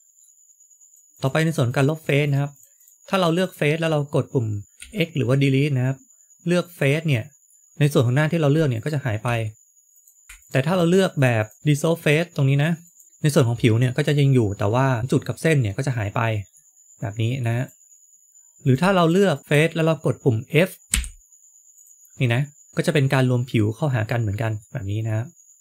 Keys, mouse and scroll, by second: 0.1 middle click, 0.9 click, 1.1 click, 1.6 click, 1.9 click, 2.2 click, 2.7 click, 3.1 click, 3.7 click, 4.7 x, 7.4 middle click, 8.7 click, 9.2 x, 10.3 ctrl+z, 10.3 click, 11.6 shift+click, 11.6 x, 15.0 shift+middle click, 16.4 middle click, 17.5 click, 18.3 shift+middle click, 18.3 scroll up 2, 18.6 click, 18.9-19.4 shift+click, 19.3 click, 20.8 f, 24.7 scroll down 1, 25.0 middle click.